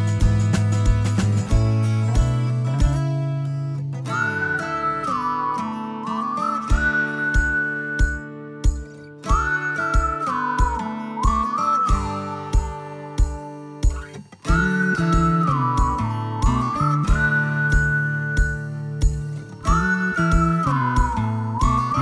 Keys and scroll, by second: 0.5 Right, 5.1 space, 8.0 p, 9.9-10.8 typing, 11.0 Escape, 11.6 Escape, 14.7 ctrl+g, 18.5 Escape, 20.8 Delete.